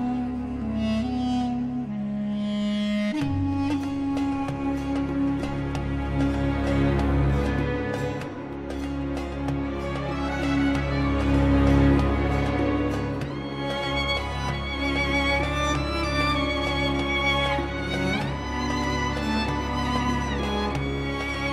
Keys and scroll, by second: 0.8 1, 1.0 0, 1.6 Return, 9.0 1, 9.2 0, 9.9 Return, 14.0 shift+F2.